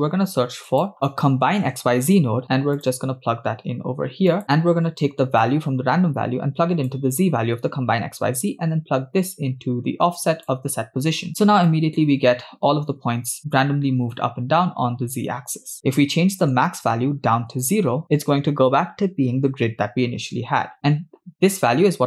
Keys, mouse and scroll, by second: 5.8-7.3 drag, 8.9 click, 11.8 middle click, 12.5 scroll down 2, 15.9 scroll up 3, 16.2 middle click, 17.8 click.